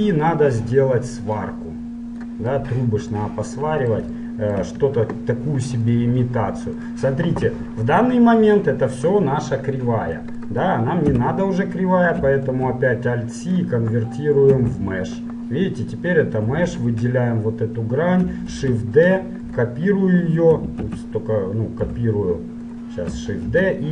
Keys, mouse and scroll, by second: 1.5-3.4 drag, 2.8 middle click, 3.9-6.1 middle drag, 6.1-10.5 right drag, 7.6 Tab, 11.4 Tab, 12.5 alt+c, 14.7 Tab, 16.3 middle click, 16.9-18.6 right drag, 18.6 shift+d, 20.9 ctrl+z, 22.1 g, 23.6 shift+d.